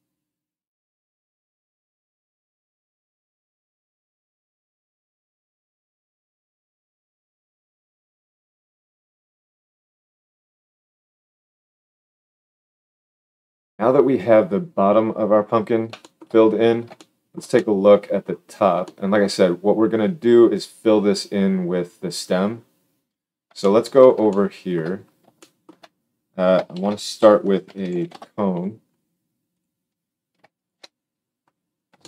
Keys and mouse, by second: 2.1 ctrl+alt+space, 3.4 right click, 20.6-23.4 middle drag, 26.6 shift+a, 29.6 click, 30.6-32.0 alt+shift+drag.